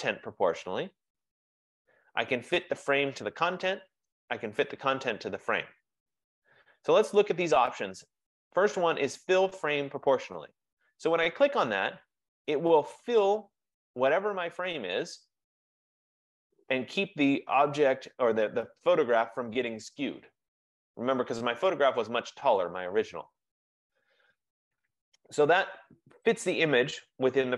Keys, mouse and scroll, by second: 11.9 click.